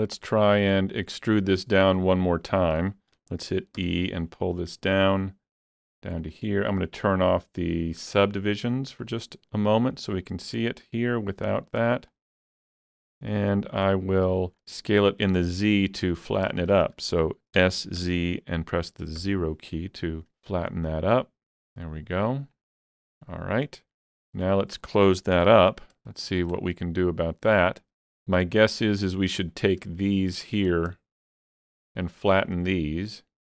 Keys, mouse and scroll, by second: 0.1 alt+z, 0.2-8.1 shift+middle drag, 3.8 e, 6.2 click, 8.1 click, 9.0 click, 10.8-16.6 drag, 15.3 shift+middle click, 16.3 scroll down 1, 17.6 s, 18.0 z, 19.2 0, 20.3 click, 21.0-22.9 drag, 23.3-24.0 scroll down 2, 24.4-26.3 middle drag, 24.4 scroll down 1, 25.5 alt+z, 25.8-26.1 scroll up 1, 26.6-30.4 shift+middle drag, 27.5 scroll up 1, 28.7 alt+click, 30.4-33.5 middle drag.